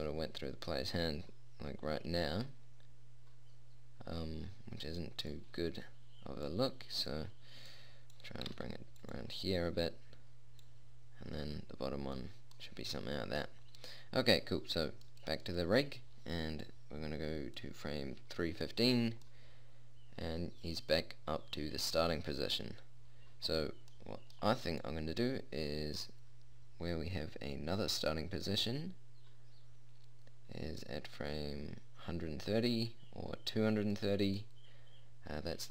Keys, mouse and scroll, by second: 6.9-10.3 drag, 8.9 r, 11.0 click, 12.9 click, 12.9 middle click, 17.0 middle click, 19.5-21.5 middle drag, 25.2-26.2 middle drag, 26.2 click, 34.8-35.7 middle drag.